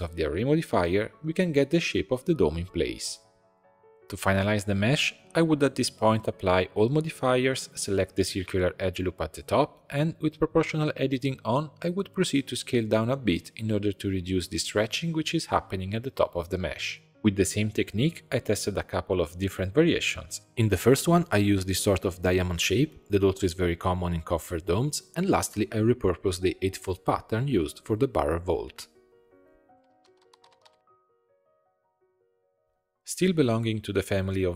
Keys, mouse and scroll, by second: 4.4-5.8 middle drag, 5.8 ctrl+a, 6.2 ctrl+a, 6.6 ctrl+a, 6.8 ctrl+a, 7.7 click, 7.8 Tab, 8.6 click, 10.4 click, 10.9 shift+middle click, 11.3 scroll up 3, 11.7 s, 16.3 middle click, 17.8 middle click, 18.6 click, 20.0 click, 20.6 click, 21.5 click, 22.0-24.9 middle drag, 24.9 click, 25.5 click, 26.3-29.3 middle drag, 32.8 Tab, 33.5 s.